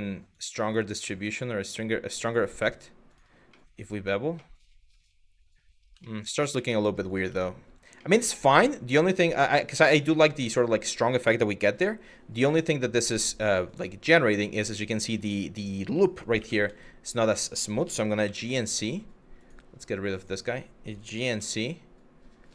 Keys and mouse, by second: 0.0 click, 2.7 click, 3.4 Tab, 4.1-5.1 middle drag, 5.7 shift+middle drag, 6.2 middle click, 6.9 Tab, 7.7 middle click, 8.9 Tab, 9.4-10.5 middle drag, 11.3 KP_3, 12.2 Tab, 13.3 click, 16.0 2, 17.5 g, 19.8 click, 20.7 g.